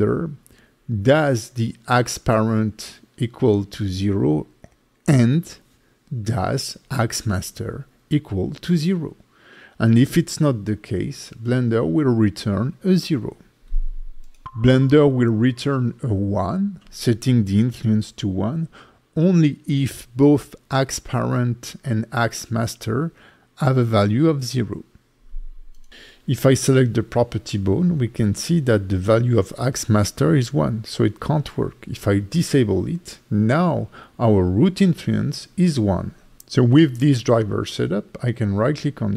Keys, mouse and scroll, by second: 27.6 scroll down 4, 28.7 click, 30.2-31.6 scroll down 3, 31.6 click, 32.7 click, 33.0 click, 36.6 right click, 38.5 right click.